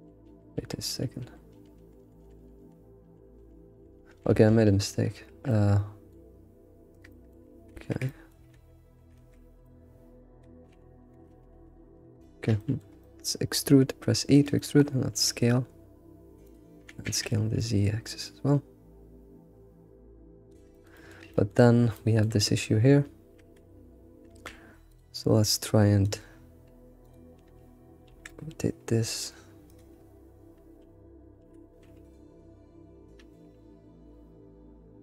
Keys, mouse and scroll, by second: 0.2 ctrl+z, 0.5 ctrl+z, 0.9 ctrl+z, 1.2 ctrl+z, 1.5 ctrl+z, 1.8-2.4 ctrl+z, 2.6 ctrl+z, 3.0 ctrl+z, 3.4 ctrl+z, 3.7 ctrl+z, 3.9 ctrl+z, 4.1 ctrl+z, 4.3 ctrl+z, 4.5 ctrl+z, 5.1-5.5 scroll down 3, 5.5-6.5 middle drag, 6.5 g, 7.1-7.7 middle drag, 7.7 ctrl+z, 8.0-8.5 middle drag, 8.5 ctrl+z, 9.1 ctrl+shift+z, 9.4 scroll down 5, 9.6-10.7 shift+middle drag, 10.7 ctrl+z, 11.0 ctrl+z, 11.5 ctrl+shift+z, 11.8 ctrl+shift+z, 12.2-13.3 shift+middle drag, 13.3 scroll up 2, 13.7 e, 14.5 middle click, 15.1 s, 16.8 s, 20.7 alt+middle click, 21.3 alt+shift+middle click, 21.6-22.4 scroll up 4, 21.9 shift+middle click, 23.4 Tab, 24.3 Tab, 24.9 click, 26.0 click, 27.0 ctrl+click, 27.5 ctrl+Left, 28.1 alt+r, 31.4 r.